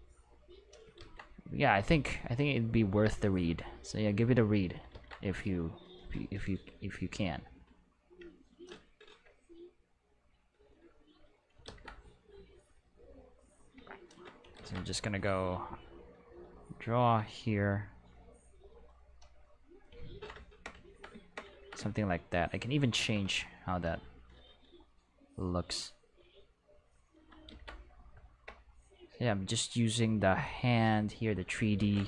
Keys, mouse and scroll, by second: 1.0 ctrl+z, 2.0-4.6 drag, 4.9 ctrl+z, 5.7-7.7 drag, 9.9-11.3 drag, 11.7 ctrl+z, 12.5-13.6 drag, 14.6 ctrl+z, 15.7-17.0 drag, 25.6-27.2 drag, 27.5 ctrl+z, 28.9-31.4 drag, 31.8 ctrl+z.